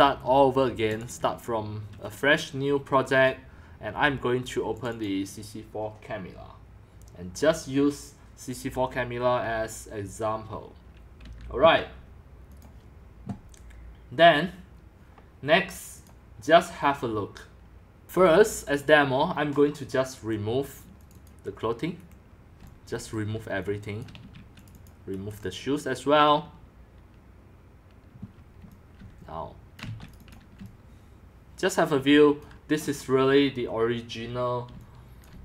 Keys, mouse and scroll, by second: 0.0-3.8 drag, 4.8 click, 5.0 click, 12.6-15.9 drag, 18.0-18.7 scroll up 10, 18.1 q, 18.7-19.2 drag, 20.1 Delete, 21.1-21.5 drag, 22.0 Delete, 22.6 x, 22.9 c, 23.2 click, 23.7 x, 24.0 click, 24.3 q, 24.7 click, 25.3 Delete, 25.3 ctrl+x, 28.4-33.3 typing, 29.1 click, 29.3 drag, 30.1 click, 30.3 click, 32.9 middle click, 33.0 scroll, 34.7-35.4 typing, 35.3-35.4 drag.